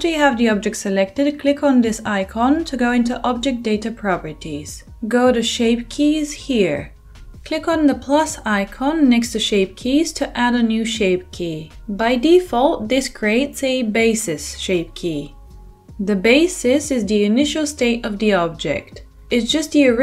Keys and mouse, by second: 0.4-7.3 middle drag, 7.3-15.5 drag, 15.5-20.0 shift+middle drag.